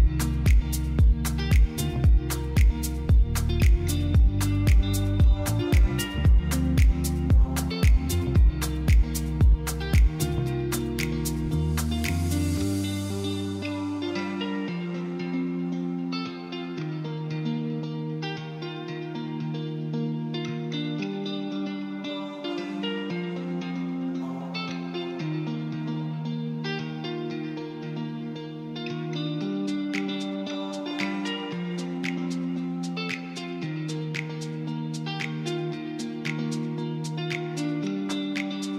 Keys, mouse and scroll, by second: 0.2 KP_7, 0.9-2.1 shift+middle drag, 2.5 s, 2.7 x, 3.6 click, 5.0 ctrl+r, 7.2 click, 7.8 ctrl+r, 8.5 click, 9.5 1, 10.0 click, 10.7 g, 12.5 click, 13.4 click, 14.0 shift+click, 15.3 click, 15.9 click, 16.9 click, 17.8 shift+click, 19.0 click, 19.5 click, 20.3 shift+click, 21.9 click, 24.0 click, 25.6 ctrl+2, 26.0 Tab, 26.7 ctrl+r, 30.4 click, 34.5 click, 35.7 middle click.